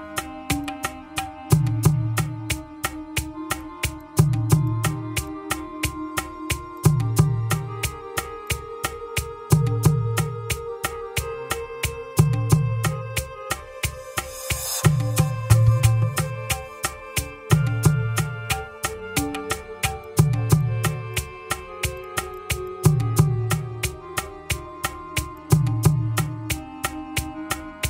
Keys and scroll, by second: 7.7 Escape, 13.8 Escape.